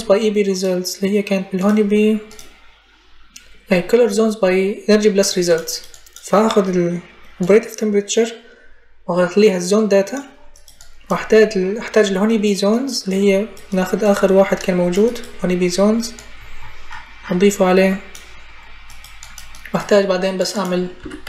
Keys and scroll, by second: 20.8 t, 21.1 i.